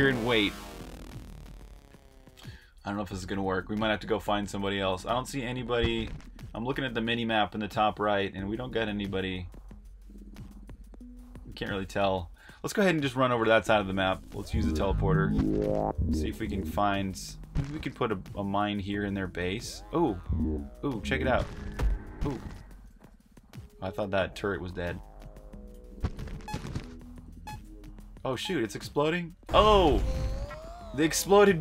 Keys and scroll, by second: 12.8-14.7 typing, 15.7-23.5 typing, 25.7-30.6 typing.